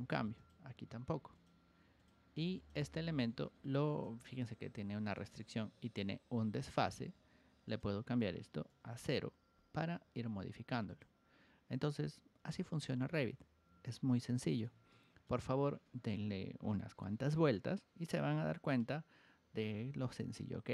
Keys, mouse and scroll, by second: 0.3 click, 1.3 click, 1.9 click, 2.5 click, 3.4 ctrl+1, 3.8 click, 4.4 ctrl+click, 6.0 click, 6.9 Escape, 7.6 click, 10.8 click, 12.2 Escape, 12.8-14.6 shift+middle drag, 14.8 middle click.